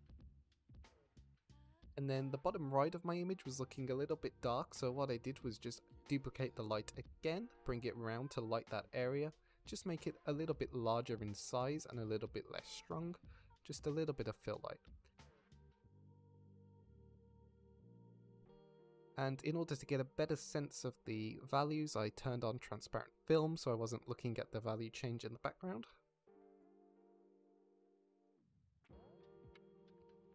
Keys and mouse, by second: 1.2 ctrl+s, 3.3-3.7 middle drag, 4.1 middle click, 4.5 shift+d, 5.5 r, 5.8 z, 7.3 drag, 8.0 g, 8.3 shift+z, 8.9 r, 9.1 z, 9.9-11.7 drag, 11.8 g, 12.1 shift+z, 12.6 r, 12.9 z, 14.1-15.0 drag, 16.1 drag, 16.6 ctrl+s, 16.9-18.1 drag, 18.2 click, 19.0 click, 19.3 ctrl+s, 26.6 click, 27.4 click, 30.1 click.